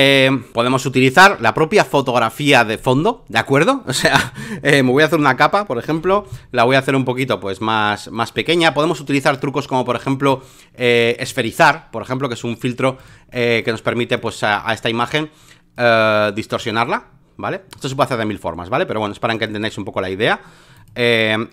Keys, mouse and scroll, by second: 0.0 alt+click, 2.8-4.8 drag, 5.1 j, 6.1 t, 6.8-11.0 drag, 11.3-18.6 drag, 19.3-21.5 drag.